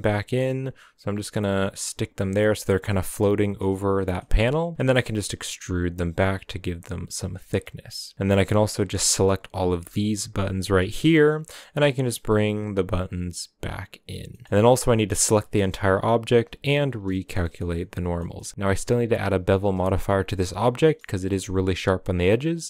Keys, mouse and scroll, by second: 2.7-3.9 middle drag, 3.9 g, 4.7 e, 7.3 scroll down 1, 7.4 middle click, 8.1-11.3 typing, 10.8 middle click, 14.3 middle click, 14.8 a, 15.1 a, 16.7 shift+n, 17.0-18.3 middle drag, 18.3 a, 18.3 middle drag, 18.5-19.4 scroll down 1, 19.4-19.8 scroll down 3, 19.8-20.5 middle drag, 20.5 scroll up 2, 20.8-22.6 shift+middle drag.